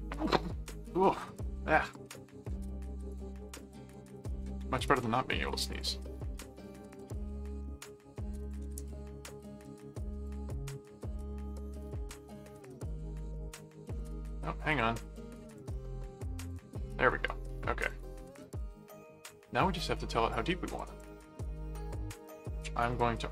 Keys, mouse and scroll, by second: 1.9 ctrl+click, 3.1 click, 4.1 ctrl+click, 4.8 ctrl+click, 5.2 ctrl+alt+a, 5.7 click, 6.9 ctrl+click, 8.4 ctrl+click, 9.6 alt+q, 10.2 click, 11.8-14.0 drag, 14.7 ctrl+click, 15.5 ctrl+alt+click, 16.3 q, 16.4 click, 17.8-20.8 drag, 20.9 click, 21.2 right click, 22.2 click, 22.9 click.